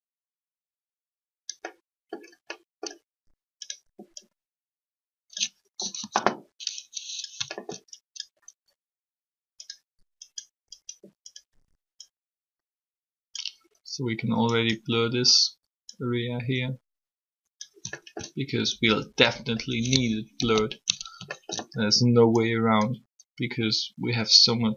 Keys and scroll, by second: 5.8 3, 20.4 ctrl+z.